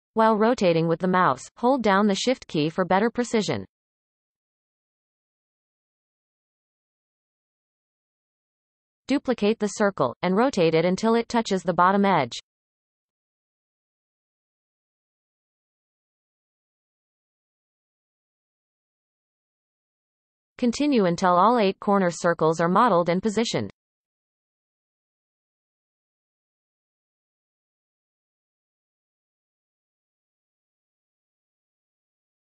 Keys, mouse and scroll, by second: 6.1-7.5 scroll down 17, 7.5-7.9 shift+middle drag, 7.9-9.1 scroll down 1, 9.1 shift+d, 10.8 shift+middle click, 11.2-11.8 scroll up 7, 11.8 shift+middle click, 12.2-13.0 scroll up 1, 13.0 shift+middle click, 13.5-13.9 scroll up 4, 14.7 r, 17.3-17.8 scroll up 7, 17.9-19.3 shift+middle drag, 19.3 r, 21.6-22.7 scroll down 25, 22.7 shift+middle click, 23.1 shift+d, 24.3 shift+middle click, 24.4-24.9 scroll up 12, 24.6 shift+middle click, 24.9 shift+middle click, 25.3 r, 26.0 scroll up 5, 26.2 shift+middle click, 26.5 shift+middle click, 26.9 r, 28.2 shift+middle click, 28.3-28.8 scroll up 9, 28.8 r, 29.4-29.9 scroll down 28, 29.9 shift+middle click, 30.2 shift+d, 31.1-32.0 scroll up 11, 31.2 shift+middle click, 31.6 shift+middle click, 32.0 shift+middle click, 32.3 r.